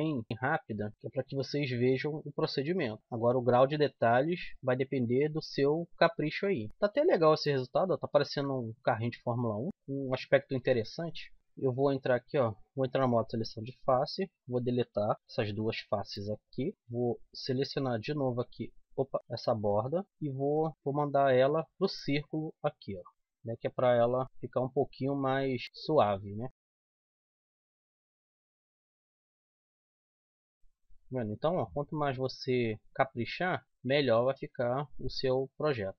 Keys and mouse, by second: 1.2 Tab, 3.3 middle click, 3.6 middle click, 4.2-6.4 middle drag, 10.5 KP_7, 11.5 Tab, 11.5 z, 15.8 x, 16.7 Tab, 16.7 z, 17.6 a, 18.9 a, 20.0 KP_7, 20.7 w, 23.7 z, 24.2 r, 25.6 a, 26.3 middle click, 29.2-30.7 middle drag, 30.8 right click, 30.8 z, 33.6 z, 35.0 middle click.